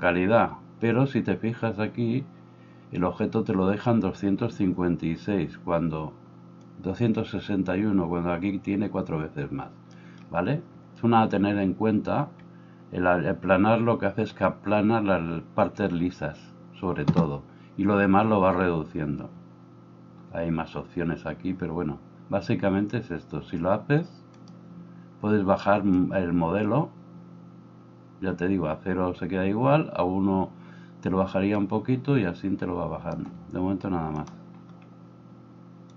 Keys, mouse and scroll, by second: 7.1-24.4 middle drag, 24.4-35.9 drag.